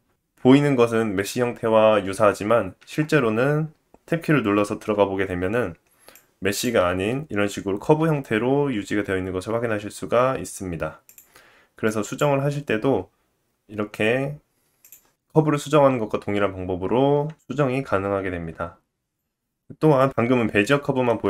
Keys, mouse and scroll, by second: 2.8 Tab, 4.8 KP_7, 6.2 click, 8.0 g, 11.0-18.8 drag, 12.3 r, 17.9 Tab, 19.0-20.5 middle drag, 20.6-21.2 shift+middle drag.